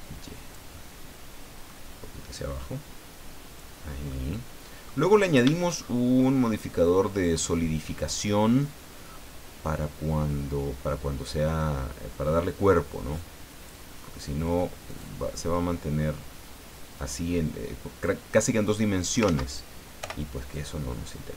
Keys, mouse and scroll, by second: 0.7-1.8 middle drag, 2.3-3.8 drag, 3.8 middle click, 3.8 scroll down 1, 4.1 click, 5.1-5.4 scroll up 1, 5.8-6.1 shift+scroll up 1, 6.3-8.0 drag, 8.3-8.6 scroll up 1, 8.7 scroll down 2, 9.7-13.8 drag, 14.9 click, 16.9 right click, 18.0-19.4 drag, 19.3 ctrl+z, 20.0 o, 20.5-21.3 drag.